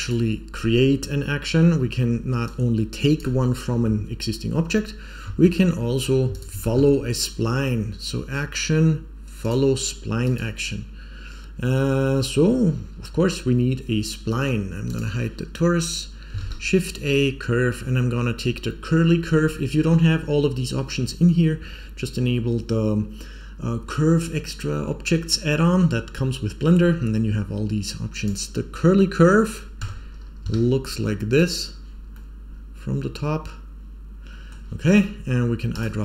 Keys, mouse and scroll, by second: 0.0 click, 1.8-2.1 scroll down 1, 2.4-3.1 drag, 5.5 middle click, 6.2 shift+click, 6.5 shift+click, 6.6 shift+a, 11.2-11.6 scroll down 1, 11.6-13.8 scroll up 1, 14.8 click, 16.3 shift+a, 28.9 middle click, 29.8 Tab, 30.4 s, 32.0-32.4 middle drag, 33.4-34.4 middle drag, 35.7 click.